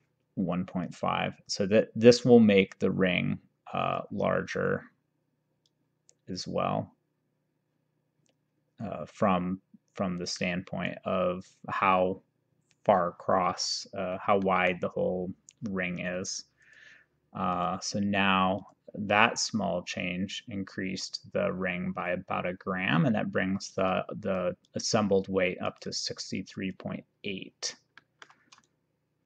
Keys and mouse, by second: 0.9 click, 5.7 click, 14.5 middle click, 16.7 click, 18.7 click, 24.0 click, 25.8 click, 28.0 middle click.